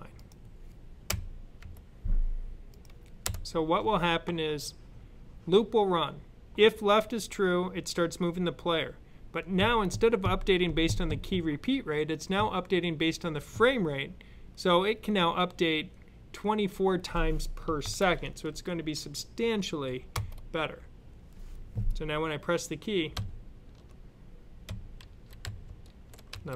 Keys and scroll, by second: 17.7 super+s, 23.0 Left, 23.5 Left, 23.6 Left, 23.7 Left, 24.5 Left, 24.9 Up, 25.3 Down, 25.5 Down, 25.5 Right, 25.7 Left, 26.2-26.5 typing.